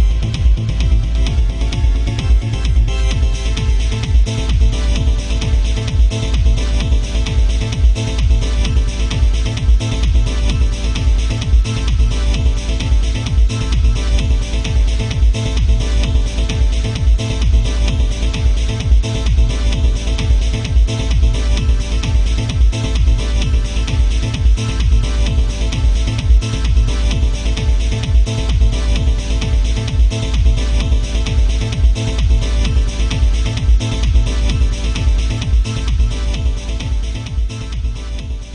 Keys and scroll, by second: 5.0 ctrl+z, 9.2 ctrl+z, 13.1 alt+space, 26.6 ctrl+z, 29.1 ctrl+z, 30.7 ctrl+z, 32.5 ctrl+z, 32.9 ctrl+z, 34.6 ctrl+z, 37.4 ctrl+z.